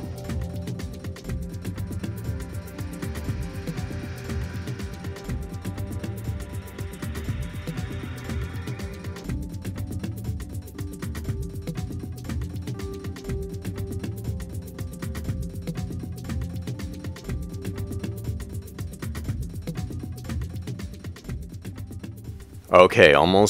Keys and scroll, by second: 0.0-0.9 typing, 1.0 Return, 1.2 Right, 1.4 Right, 1.7 Right, 3.2 Left, 3.4 Right, 4.7-6.9 typing, 7.3 Right, 7.3 Down, 7.5 Up, 8.1-12.4 typing, 12.7 Right, 13.0 super+a, 15.4-16.7 typing, 18.9 ⟳, 19.0 super+a, 19.7 Right, 19.9 Down, 21.8 super+Tab, 22.3 super+a, 22.9 super+Tab, 23.3 super+Tab.